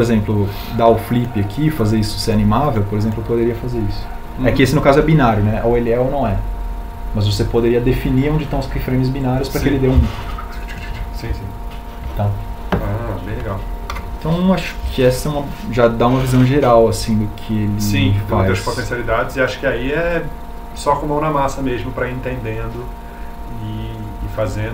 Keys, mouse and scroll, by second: 12.6 Home.